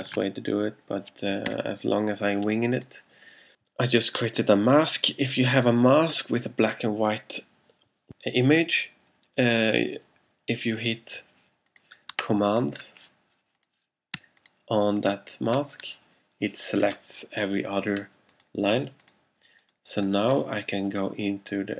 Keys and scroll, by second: 0.2 alt+super+v, 1.5 Return.